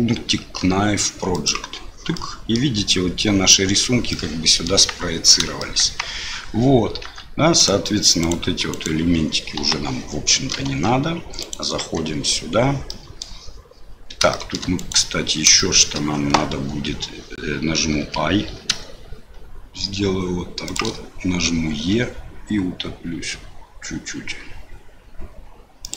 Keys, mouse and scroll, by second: 2.1 middle click, 4.1 middle click, 5.6 shift+middle click, 7.0 Tab, 7.6 click, 8.2 click, 8.7 click, 9.6 Delete, 10.3 middle click, 10.6 Tab, 11.4 click, 11.8 Tab, 12.9 click, 14.3 shift+click, 14.8 click, 15.6 shift+click, 17.9 i, 21.7 e.